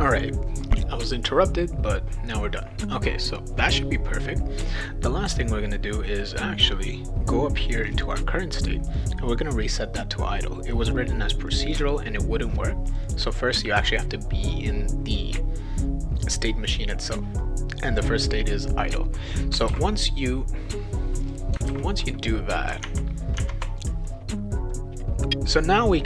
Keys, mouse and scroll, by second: 7.8 click, 8.0 click, 8.9 click, 9.0 click, 11.5 click, 11.6 click, 12.9 click, 13.0 click, 17.2 scroll down 2, 19.7 ctrl+w, 19.7 ctrl+s, 21.2 click, 21.7 ctrl+s, 22.8 alt+Tab, 23.4 alt+Tab, 25.9 click.